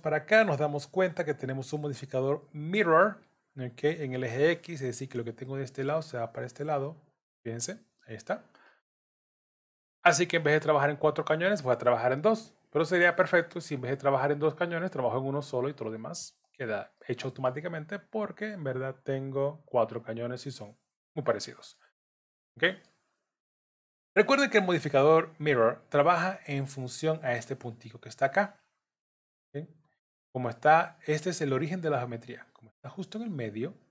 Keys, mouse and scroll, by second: 0.2 click, 2.4 middle click, 7.0 click, 7.3 click, 8.7 middle click, 17.0 middle click, 18.1-18.7 scroll down 2, 20.7-21.4 scroll up 3, 21.2 middle click, 21.8 scroll down 2, 22.2 middle click.